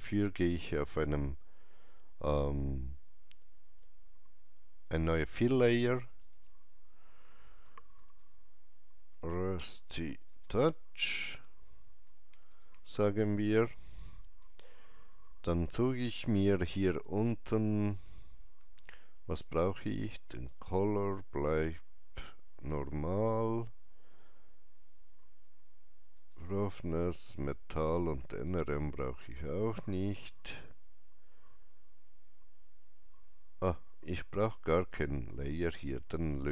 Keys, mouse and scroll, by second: 0.9 click, 0.9 shift+middle click, 0.9 alt+right click, 6.0 click, 6.0 shift+middle click, 7.3-10.2 typing, 11.3-13.1 typing, 20.2 Return, 20.2 click, 20.2 typing, 26.1 Return, 26.1 click, 27.3 click, 36.3 click.